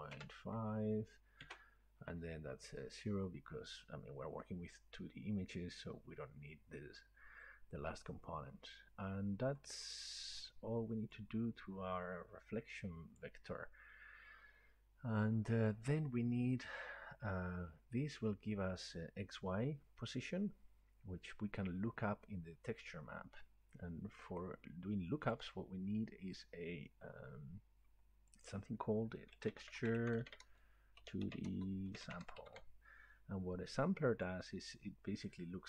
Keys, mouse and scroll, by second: 1.2-1.9 typing, 9.3 scroll down 1, 10.4 middle click, 13.2 click, 17.7 click, 24.4-27.1 right drag, 25.5-27.1 drag, 28.5 click, 29.1-31.0 typing, 32.2-33.1 typing, 34.3 click.